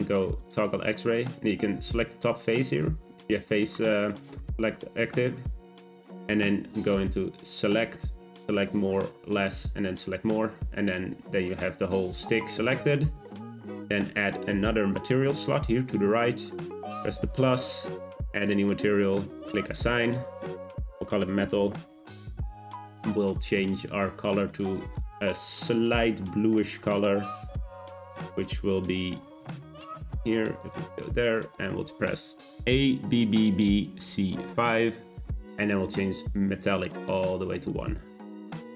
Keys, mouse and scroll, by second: 1.9 click, 2.8-5.8 middle drag, 7.4-10.5 drag, 16.6-22.0 drag, 22.0 l, 23.1-24.5 scroll down 2, 24.5 click, 30.6 click, 37.8-38.7 drag.